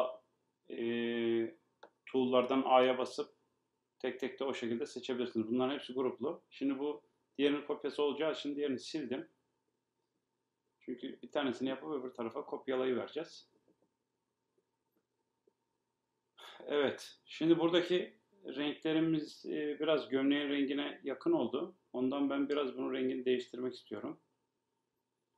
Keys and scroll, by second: 4.9 BackSpace.